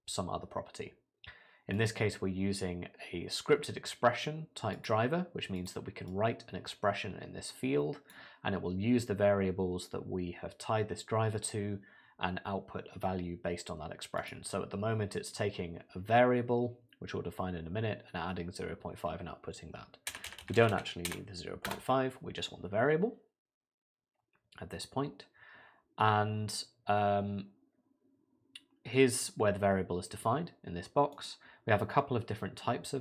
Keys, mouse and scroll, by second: 20.3 BackSpace, 20.4 BackSpace, 20.7 BackSpace.